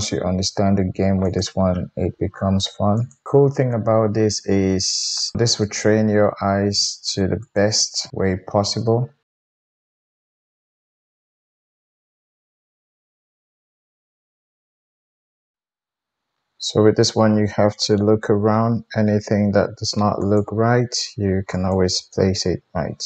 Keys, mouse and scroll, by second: 0.1 g, 2.9 click, 3.1-5.1 middle drag, 5.1 click, 5.2-7.4 middle drag, 6.3 alt+z, 7.4 click, 7.6-8.1 middle drag, 8.1-9.1 drag, 8.1 g, 9.1 middle click, 9.4-15.6 typing, 9.5 click, 9.6 middle click, 9.8 click, 9.8 shift+middle click, 10.7 click, 10.8 shift+middle click, 10.9 click, 11.1 middle click, 11.2 alt+z, 11.3 click, 11.5 middle click, 11.6 click, 11.7 middle click, 11.9 Tab, 11.9 alt+click, 12.0 alt+z, 12.1 alt+z, 12.1-13.1 alt+middle drag, 12.4 alt+z, 12.7 Tab, 13.0 Tab, 13.1 click, 13.2-13.6 middle drag, 13.6 click, 13.8 middle click, 14.3 click, 14.3-17.1 middle drag, 15.0 alt+z, 15.7 Tab, 16.2 ctrl+s, 16.2-20.3 drag, 18.2 g, 20.3-21.5 middle drag, 21.5 click, 21.7-23.0 middle drag, 22.5 g.